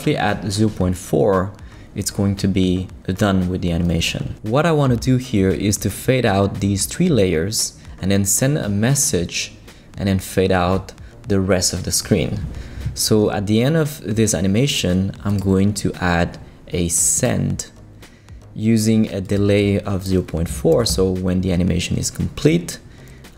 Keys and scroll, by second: 20.7 4, 20.9 Return.